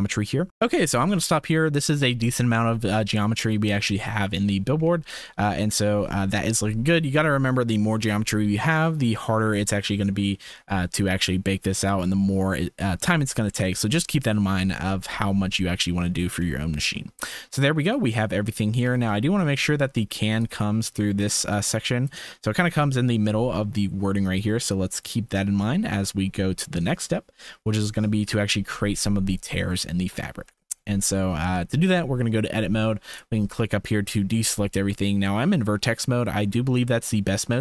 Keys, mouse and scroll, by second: 0.5 ctrl+s, 3.6 shift+middle click, 16.2 shift+middle click, 17.7 shift+middle click, 18.8 Tab, 19.2 click, 20.4-22.0 drag, 24.7-26.0 drag, 27.6 click, 28.2 KP_1, 29.8-30.1 shift+middle drag, 30.5 Tab.